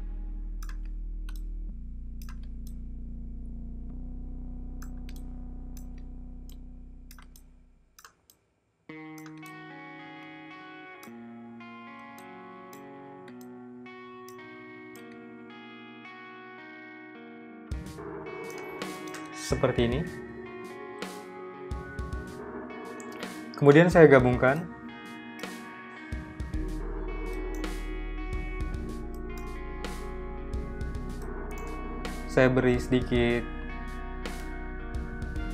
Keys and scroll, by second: 28.1 z, 28.6 v, 30.3 z, 30.8 v.